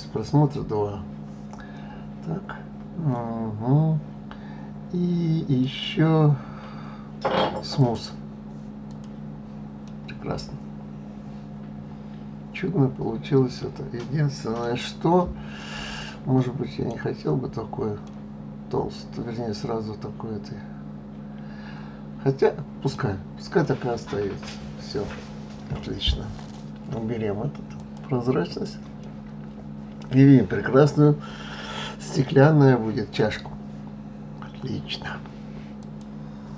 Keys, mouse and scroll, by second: 5.6-8.6 right drag, 8.9 click, 9.8-13.0 middle drag, 15.1-15.5 scroll up 1, 15.5-21.1 middle drag, 22.9 scroll down 3, 23.6-26.7 middle drag, 27.7 click, 28.5 click, 29.0-32.0 middle drag.